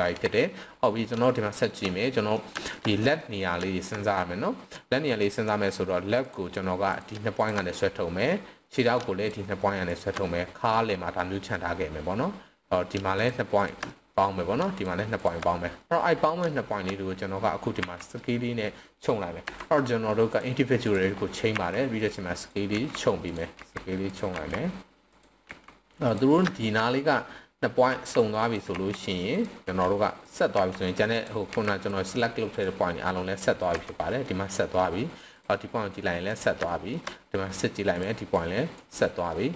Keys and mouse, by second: 0.1 KP_7, 1.4-1.7 shift+middle drag, 1.9-2.4 middle drag, 2.6 shift+middle click, 2.9 middle click, 3.7 shift+middle click, 4.0 middle click, 6.1 click, 6.8 click, 7.3 shift+click, 7.8-8.2 middle drag, 9.2 shift+drag, 9.8 shift+click, 10.2-10.7 middle drag, 11.6-12.2 middle drag, 13.1 shift+click, 13.5 shift+drag, 13.9 middle click, 15.1 shift+click, 15.8 middle click, 16.4 shift+middle click, 17.7 s, 19.4 Escape, 20.3-20.9 drag, 21.5 s, 22.4 drag, 22.7 s, 23.2 drag, 23.5 s, 24.1 drag, 24.4 s, 25.1 click, 25.4 s, 26.1 drag, 26.5 shift+middle click, 26.8-27.2 middle drag, 27.9-31.5 typing, 28.4 click, 29.3 click, 30.2 drag, 31.1 click, 31.9 click, 33.1-33.7 drag, 33.7 Escape, 34.2 middle click, 35.3 click, 35.9-36.2 drag, 36.7 shift+middle drag, 37.1-37.5 middle drag, 38.4 click, 38.9-39.3 middle drag.